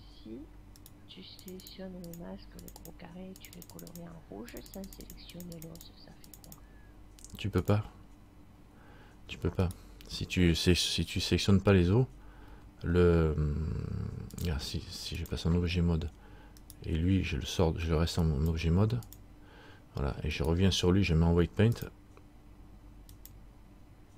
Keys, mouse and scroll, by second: 1.0 click, 1.0 right click, 1.6 click, 3.0-9.8 click, 9.8 right click, 11.3 a, 13.3 a, 14.5 click, 16.8 right click, 18.4 click, 20.5 right click, 21.9 click.